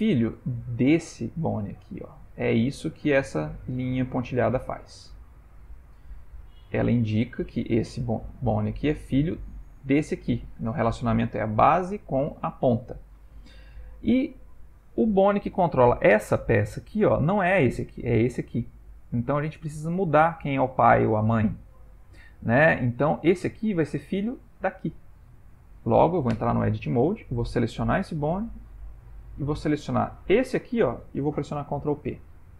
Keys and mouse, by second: 0.8 click, 6.5 ctrl+middle click, 7.6 click, 22.6 click, 26.5 Tab, 27.3 click, 30.3 shift+click, 31.6 ctrl+p.